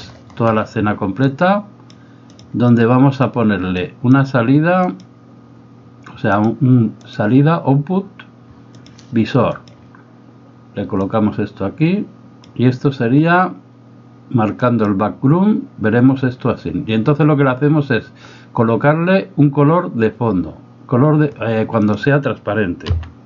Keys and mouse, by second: 1.3 click, 2.3-3.3 drag, 3.9 click, 5.1-9.7 drag, 11.0-12.5 drag, 14.7 click, 21.9 click.